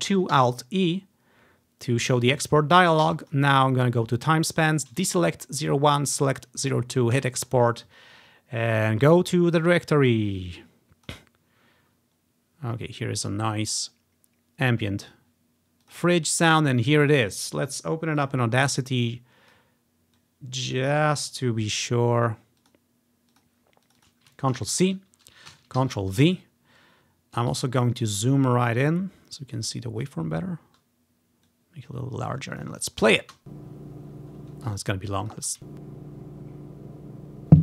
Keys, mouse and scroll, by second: 0.4 alt+e, 3.3-5.2 drag, 5.1 typing, 6.2 click, 7.2 click, 8.1 click, 8.7-11.2 drag, 11.9-14.0 drag, 15.2 click, 15.9 click, 16.6 click, 18.3 click, 19.2 click, 19.8 click, 20.3-22.0 drag, 22.7 click, 23.4 click, 23.9 click, 24.7 ctrl+c, 24.7-25.9 drag, 25.6 Right, 25.9 ctrl+v, 26.4-28.1 drag, 28.1-29.1 scroll up 2, 29.6-30.2 scroll down 1, 30.2-30.9 scroll up 1, 31.6 click, 32.3 click, 32.4 click, 32.7 click, 32.9-33.4 scroll up 1, 33.4 space, 34.2-34.8 scroll down 1, 34.7 space, 34.8 click, 35.3 click, 35.5 space, 35.9 scroll up 1.